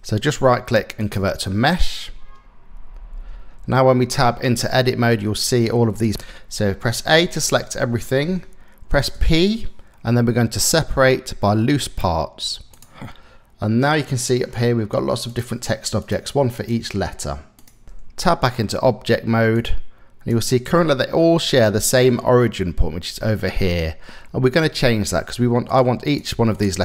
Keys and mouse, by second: 0.0 click, 3.0 Tab, 6.8 a, 8.7 p, 16.2-17.3 drag, 17.8 Tab, 19.2 click, 25.7 click.